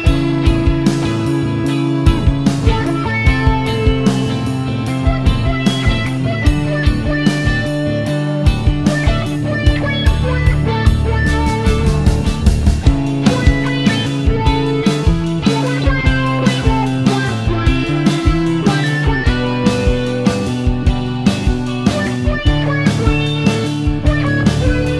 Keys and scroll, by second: 12.8 BackSpace, 18.2 d.